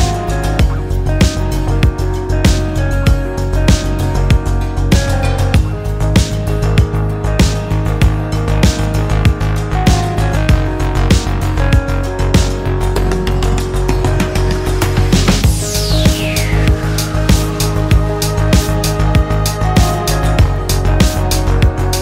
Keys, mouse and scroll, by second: 2.3-3.6 drag, 4.8 click, 6.4 click, 7.1 click, 7.6 click, 8.7 click, 12.0 click, 14.0 click, 15.2 click, 16.2 click, 18.4 click, 20.3 click, 21.1 click.